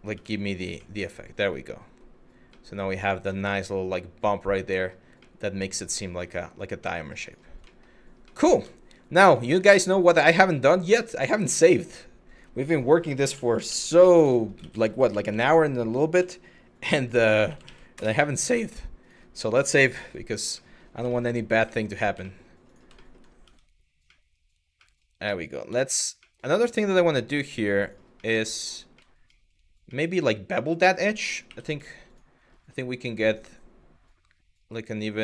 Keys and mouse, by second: 0.4-1.6 middle drag, 2.2 middle drag, 3.0-4.4 middle drag, 5.0-5.9 middle drag, 6.5 middle drag, 6.9 click, 7.4 shift+middle click, 8.0 middle click, 9.2 ctrl+s, 19.5 click, 20.3 middle click, 20.8 shift+middle click, 21.3 middle drag, 21.9 shift+middle drag, 22.6 shift+middle drag, 23.1 Tab, 23.7 middle click, 24.5 middle click, 25.3 Tab, 25.9 middle click, 26.1 Tab, 27.4 click, 27.9 middle click, 28.7 shift+middle click, 29.0 shift+middle click, 29.6 middle click, 31.1 2.